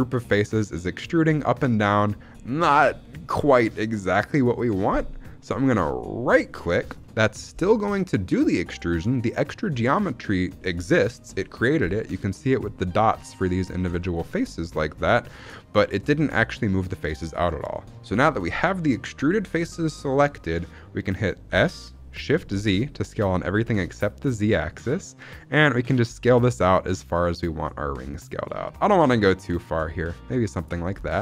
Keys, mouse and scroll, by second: 6.2 right click, 6.9 shift+middle click, 7.7-8.3 scroll up 6, 14.5 shift+middle click, 14.5-15.2 scroll down 3, 15.2 shift+middle click, 15.4-15.8 scroll up 1, 15.9-17.0 scroll down 1, 21.4 s, 22.4 shift+z, 30.5 click, 30.8 scroll down 2, 31.1 shift+middle click.